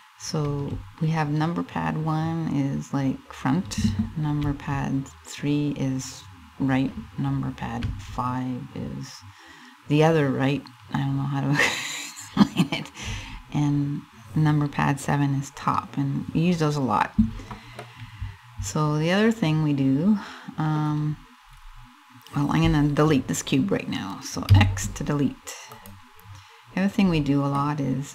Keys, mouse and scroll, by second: 0.2 KP_1, 4.0 KP_3, 7.4 KP_5, 12.7 KP_7, 17.5 middle click, 20.8-21.1 scroll up 2, 21.1-21.7 scroll down 4, 24.1 x, 27.2 middle click.